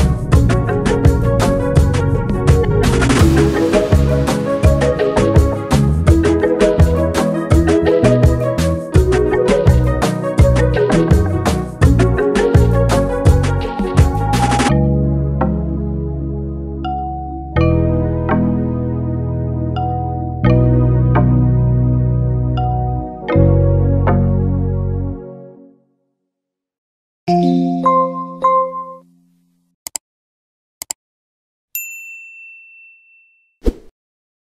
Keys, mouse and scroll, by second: 0.8 click, 2.7 click, 3.7 click, 4.8 click, 6.6 click, 7.4 1, 7.7 click, 9.4 click, 9.7 click, 11.3 click, 13.1 2, 13.3 click, 14.1 click, 15.7 click.